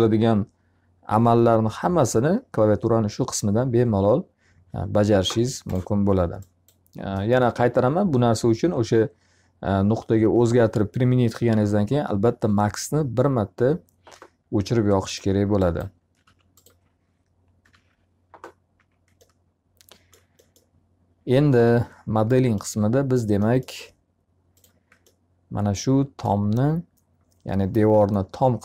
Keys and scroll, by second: 15.7 alt+r, 17.5 p, 18.6 z.